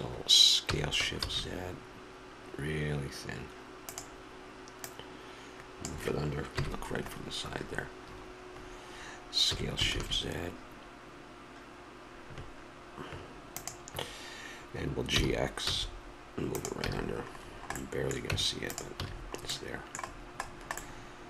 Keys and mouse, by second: 0.7 s, 4.8-6.5 drag, 6.5 KP_1, 9.4 s, 15.1 g, 16.8 a, 18.3 Tab, 19.0 a.